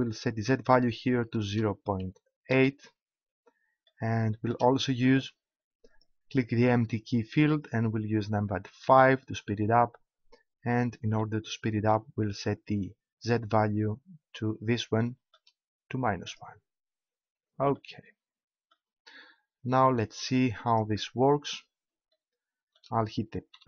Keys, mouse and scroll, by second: 17.0-18.4 drag, 20.4-22.4 drag, 23.5 p.